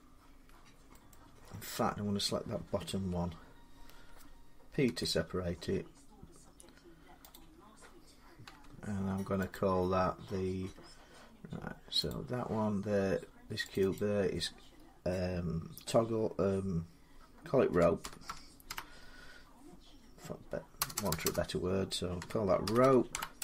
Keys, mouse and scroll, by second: 0.9 middle click, 2.7 l, 4.7 p, 7.8 click, 8.3 Tab, 9.4 click, 11.9 click, 13.6 click, 13.8 click, 17.5-18.5 typing, 20.6-22.9 typing.